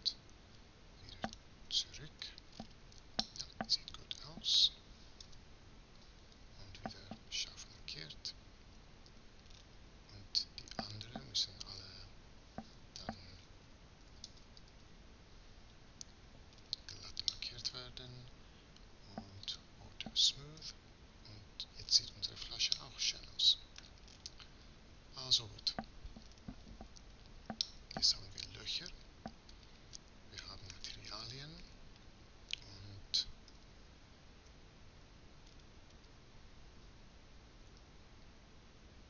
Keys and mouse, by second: 1.9 z, 2.9 middle click, 4.9 space, 7.4 z, 8.5 Tab, 9.8 Tab, 10.9 a, 11.7 a, 12.7 space, 20.3 Tab, 33.1 KP_0, 37.5 KP_0, 38.3 KP_0.